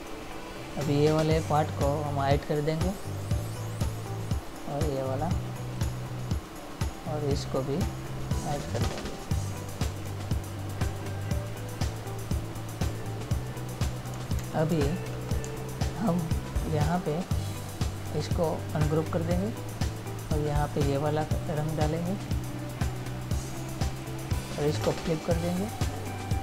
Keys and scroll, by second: 14.6 ctrl+-, 15.7 space.